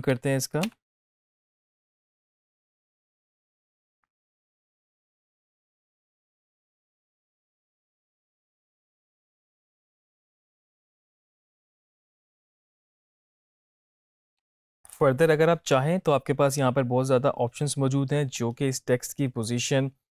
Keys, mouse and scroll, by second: 0.1 v, 0.8 space, 14.5 space, 15.1 click, 19.5-20.1 drag.